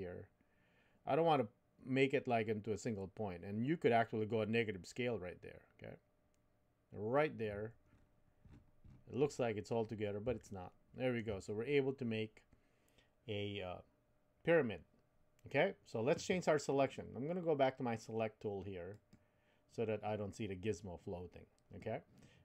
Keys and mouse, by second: 10.5 shift+middle click, 19.1 click.